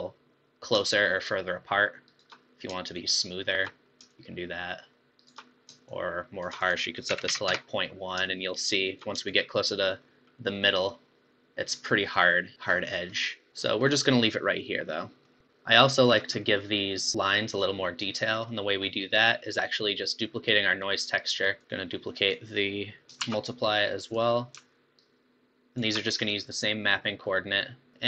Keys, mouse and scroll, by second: 1.3 shift+Left, 1.3 click, 2.9 shift+Left, 2.9-5.2 drag, 4.2 shift+Left, 5.9-8.7 shift+drag, 9.3-12.3 shift+drag, 13.5 Left, 13.5 click, 13.9-16.1 middle drag, 16.1-16.4 scroll up 4, 16.4-18.2 middle drag, 18.2 scroll up 1, 18.5-20.8 middle drag, 20.8 drag, 21.6 click, 23.2 shift+d, 25.0-27.2 alt+right drag, 27.2-27.6 scroll up 2, 27.9-28.0 middle drag.